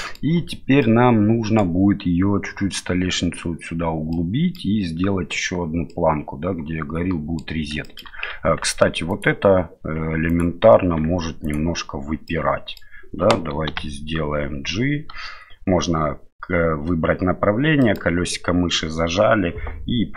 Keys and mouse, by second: 0.8-1.6 middle drag, 4.1-4.5 middle drag, 5.9-7.4 middle drag, 7.8 shift+middle drag, 8.3 Tab, 9.1 right click, 10.0 Tab, 10.3 right click, 10.9 Tab, 11.4 right click, 12.2 middle click, 13.7 g.